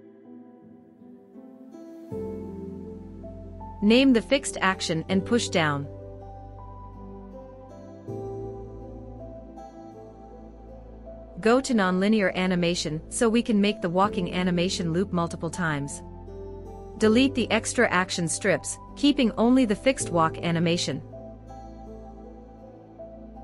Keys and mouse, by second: 0.7-4.4 drag, 6.5 click, 13.5 click, 16.8 click, 18.0 x, 19.2 click, 20.2 x, 23.3 click.